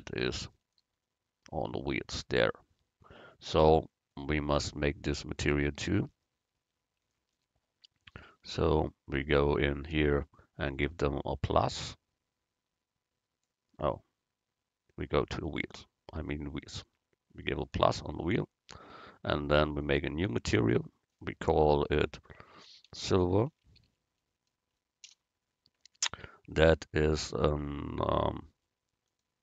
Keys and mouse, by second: 11.7-13.6 drag, 15.4-17.7 right drag, 17.7-19.6 drag, 19.9-23.1 drag, 29.2-29.4 drag.